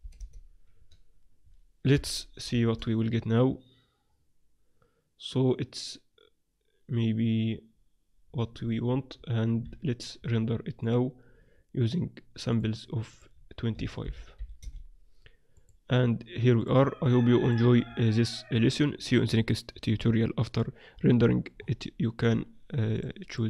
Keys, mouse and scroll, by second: 1.0 click, 1.9 KP_0, 3.0 shift+z, 9.7 z, 10.2 z, 10.8-15.0 drag, 15.5-19.0 drag, 17.8-19.4 middle drag, 19.8-22.9 middle drag, 22.9 click.